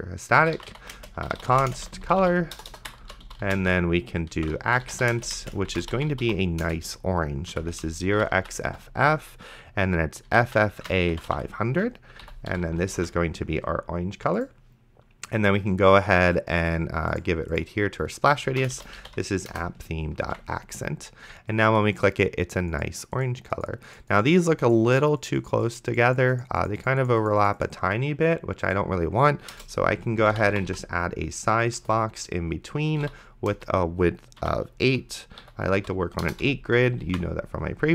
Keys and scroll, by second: 0.1-8.5 typing, 10.3-12.5 typing, 12.2 End, 13.2 ctrl+s, 18.6 p, 19.1 h, 19.5 Return, 20.5 ctrl+s, 29.8 Return, 30.0-31.2 typing, 31.8 Return, 32.7-34.4 typing, 34.9 Delete, 35.4 End, 35.8 ;, 36.2 BackSpace, 36.5 ,, 37.3 ctrl+s.